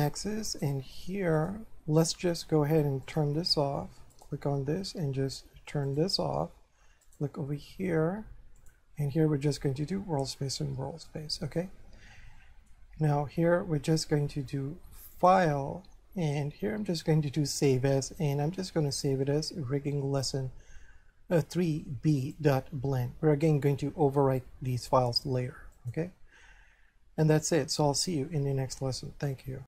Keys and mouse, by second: 1.4 click, 3.1 click, 4.1 right click, 5.9 click, 7.1 right click, 8.6 click, 11.1 shift+middle click, 15.1 click, 17.6 click, 22.2 click, 25.8 click.